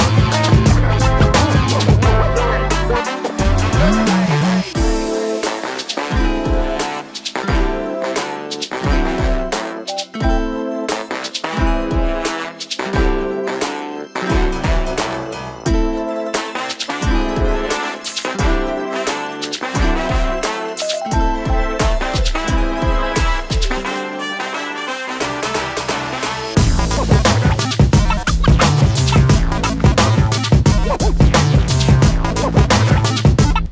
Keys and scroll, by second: 20.1 Escape, 31.3 p.